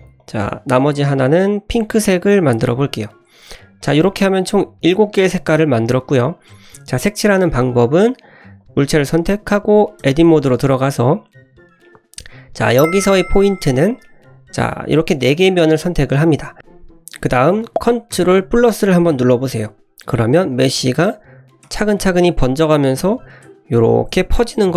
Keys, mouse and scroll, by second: 0.2 drag, 1.1 click, 2.8 click, 3.3-3.8 scroll down 1, 3.8 click, 4.1-5.8 scroll up 3, 5.8 scroll up 1, 8.2 click, 8.6 click, 9.5 scroll up 1, 10.0 Tab, 11.8-12.1 middle drag, 12.5 click, 13.6 scroll up 1, 14.0-14.5 middle drag, 14.6 click, 21.6-24.7 ctrl+KP_Add.